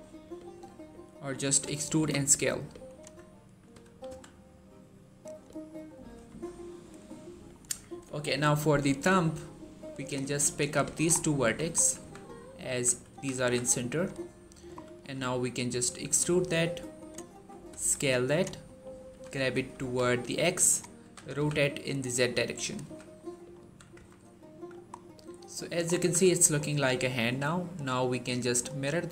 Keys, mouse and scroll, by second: 1.4 e, 1.8 s, 2.7 click, 2.9 1, 3.3 scroll up 1, 3.6 g, 3.9 x, 5.1 click, 5.5-6.0 scroll down 1, 6.0 Tab, 6.3-6.9 scroll down 1, 6.9-7.6 middle click, 7.3-8.4 scroll up 2, 7.5 Tab, 8.4 middle click, 9.8 click, 11.0 shift+scroll down 2, 11.1 middle click, 11.3 1, 11.6 scroll up 1, 11.8 z, 13.0 s, 13.2 z, 13.8 click, 14.1 scroll down 1, 14.6 scroll up 1, 14.8 shift+middle click, 15.4 e, 16.8 click, 17.6 s, 18.1 click, 18.5 middle click, 19.0 g, 19.2 y, 19.6 x, 20.6 click, 20.9 r, 21.1 z, 22.3 click, 22.7 z, 22.8 scroll down 1, 23.0-23.6 middle click, 23.4 1, 23.8 Tab, 24.1-24.4 scroll down 1, 24.4 middle click, 24.8 scroll down 1, 25.0-25.6 middle click, 25.7 scroll up 1, 25.8 1, 26.2 shift+middle click, 27.6 click.